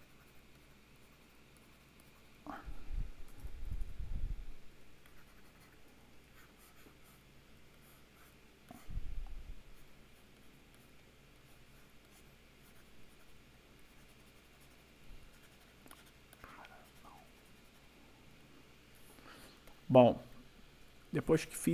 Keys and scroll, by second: 5.9 ], 7.4 ], 9.5 ].